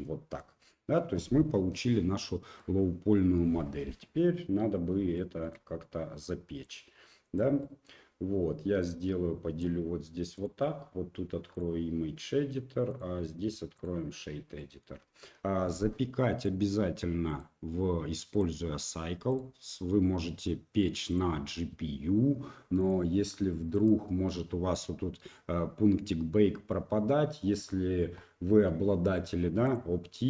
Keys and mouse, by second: 2.6-3.4 middle drag, 5.1 shift+middle click, 6.6-30.2 drag.